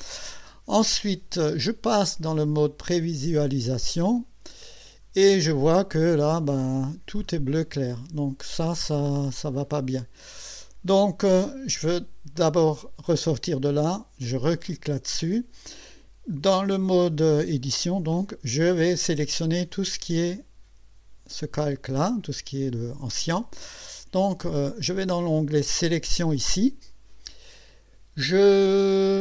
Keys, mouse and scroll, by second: 3.3 click, 5.0 scroll up 1, 5.7 middle click, 6.7 scroll up 1, 7.2-8.1 scroll up 3, 8.8 middle click, 9.6 scroll up 2, 10.5 scroll up 2, 14.7 click, 24.6 click, 25.5 click.